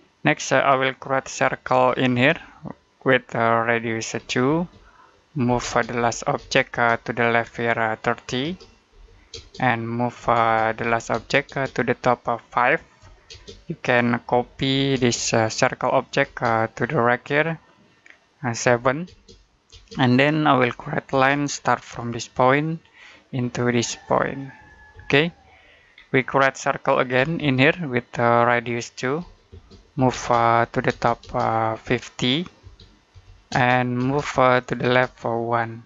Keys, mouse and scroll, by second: 1.2-1.6 scroll up 1, 1.6 c, 2.0 space, 2.8 click, 4.0 2, 4.3 space, 5.4 m, 5.5 space, 5.8 l, 6.2 space, 6.8 click, 8.3-11.0 typing, 11.6 click, 12.9-14.8 typing, 15.4 click, 16.1 space, 16.3 click, 18.5 7, 18.9 space, 20.5 l, 21.0 space, 21.4-22.4 scroll up 1, 22.7 click, 24.8 space, 25.0-25.4 scroll down 1, 25.4 middle click, 25.7-26.1 scroll down 1, 26.1 middle click, 27.0 c, 27.2 space, 28.2 click, 29.1-30.7 typing, 31.3 click, 32.5-33.4 typing, 34.1 click, 34.7 space, 34.9 click.